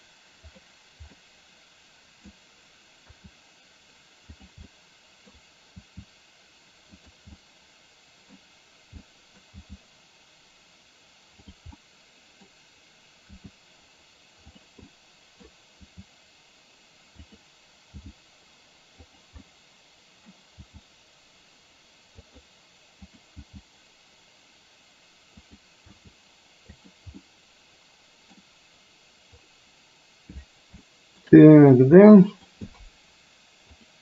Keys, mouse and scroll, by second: 1.3-2.4 middle drag, 3.1 r, 4.8 middle click, 5.9 r, 7.4-8.4 middle drag, 9.2 middle click, 9.7 g, 11.8-12.6 middle drag, 13.4 r, 14.9-15.4 middle drag, 15.9 r, 18.1 g, 19.6-20.4 middle drag, 20.7 g, 23.1 click, 23.6 g, 26.1 r, 27.3-28.4 middle drag, 30.9-31.3 shift+middle drag, 31.6 middle drag, 32.1-32.4 middle drag, 33.7 click.